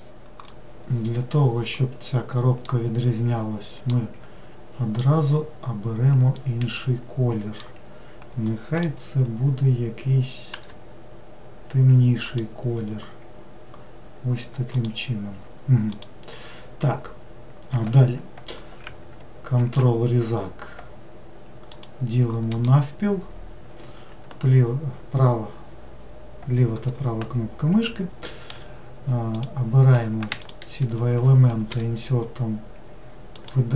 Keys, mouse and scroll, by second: 2.7-5.7 middle drag, 6.3-10.5 middle drag, 10.5 g, 14.7 click, 15.9 click, 19.6 ctrl+r, 28.5 3, 29.3 click, 30.4 shift+click.